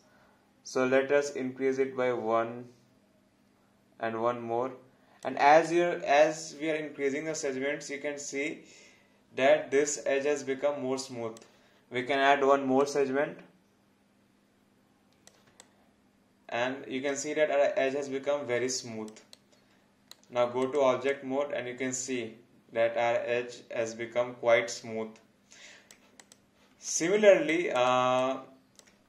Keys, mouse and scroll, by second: 5.7 alt+click, 15.6 alt+click, 19.3 right click, 20.6 click, 21.1 alt+click, 26.9 alt+click, 28.2 alt+click.